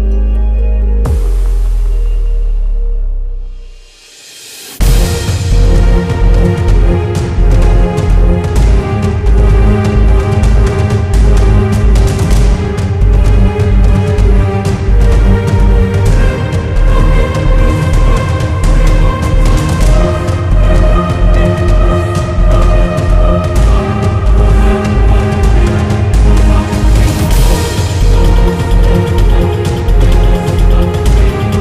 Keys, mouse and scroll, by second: 3.6 space, 4.2 shift+click, 4.9-5.3 typing, 6.2-9.5 drag, 11.4-11.8 ctrl+scroll up 1, 12.8 ctrl+z, 14.2 click, 17.9 Delete, 18.7 click, 20.9-22.0 typing, 21.9 click, 23.3 right click, 25.8-31.6 drag.